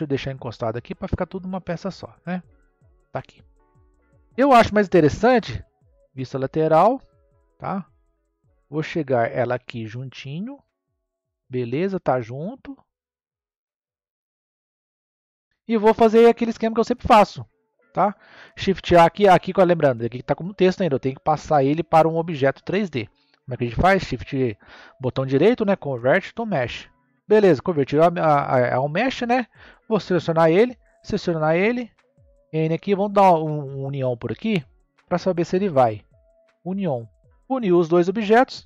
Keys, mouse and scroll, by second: 3.3-5.5 middle drag, 7.5 click, 12.5 click, 15.1-15.8 middle drag, 15.8-16.1 scroll, 16.5-17.7 middle drag, 17.7 click, 19.4 scroll down 2, 22.5-23.6 scroll down 2, 23.6-29.4 right drag, 29.4 click, 30.6 shift+click, 32.1 n, 33.5 click, 35.0-37.9 drag, 37.9-38.6 middle drag.